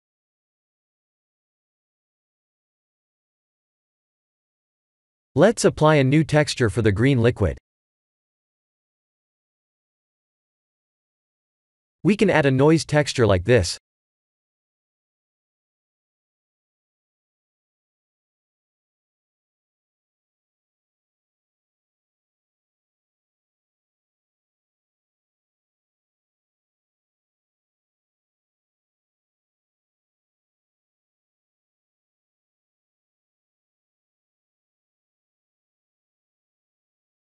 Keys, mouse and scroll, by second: 0.0 scroll down 2, 0.7-1.7 scroll up 1, 1.7 Tab, 3.1 Tab, 4.8 Tab, 4.8 click, 5.7 click, 7.4 click, 10.6 click, 10.9 shift+a, 14.4 click, 16.5-17.1 scroll up 6, 17.1 shift+middle click, 17.7 middle click, 19.6 click, 22.4 click, 24.6 click, 26.4 click, 33.9 middle click, 34.7 middle click.